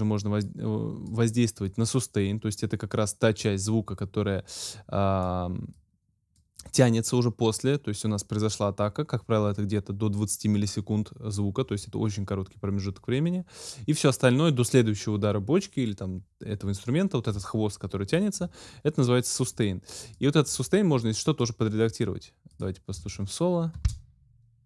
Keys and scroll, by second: 23.8 space.